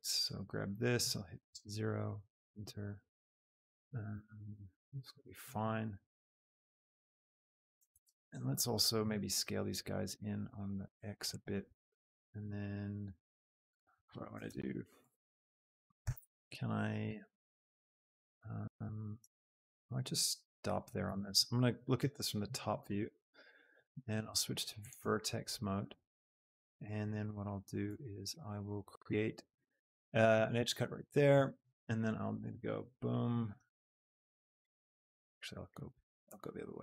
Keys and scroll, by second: 1.4 KP_0, 2.1 Return, 4.3 shift+Tab, 8.0 shift+Tab, 11.6 Tab, 14.6 Tab, 16.0 ctrl+r, 17.1 Escape, 26.7 a, 30.7 Escape, 31.5 a, 31.8 b, 33.7 b, 35.9 a, 36.2 b.